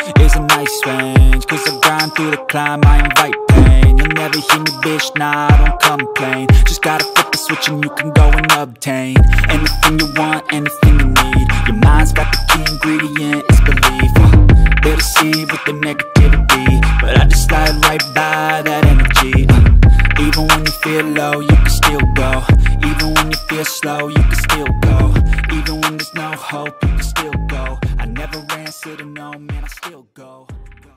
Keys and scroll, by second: 1.1 ctrl+g, 1.4-2.3 typing, 17.0-19.6 typing, 20.7 ctrl+0.